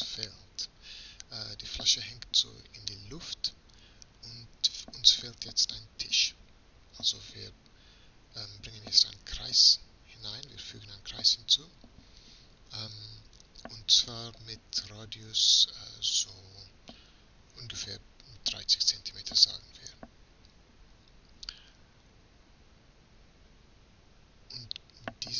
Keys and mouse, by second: 0.0-1.6 middle drag, 1.9 shift+z, 8.7 shift+a.